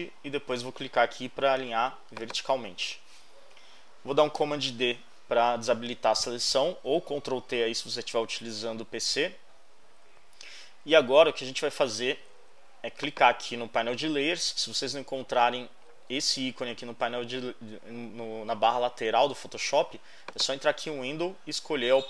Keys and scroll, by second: 8.9 super+d.